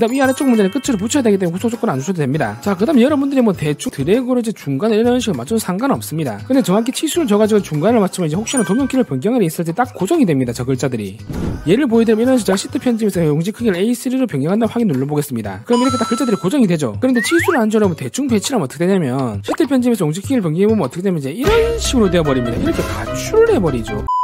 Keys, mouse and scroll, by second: 3.9 click, 4.7 click, 5.8 click, 13.2 click, 14.6 click, 15.5 click.